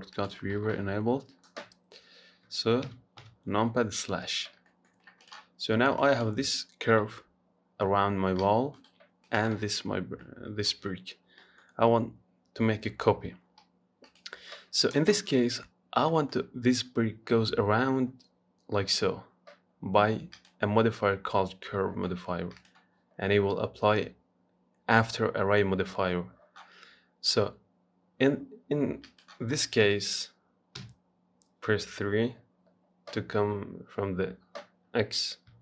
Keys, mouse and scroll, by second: 0.4-3.1 drag, 3.1 KP_Divide, 3.4 KP_Divide, 4.9 middle click, 5.3 scroll up 1, 5.5 click, 6.2 click, 7.3 g, 9.5 click, 10.2 scroll down 1, 10.4 middle click, 11.4 scroll down 1, 11.6 middle click, 12.0-14.2 scroll up 2, 14.3 click, 16.3-19.6 middle drag, 20.6-22.9 drag, 29.3 click, 30.1 KP_1, 31.0 KP_3, 35.5 scroll down 1.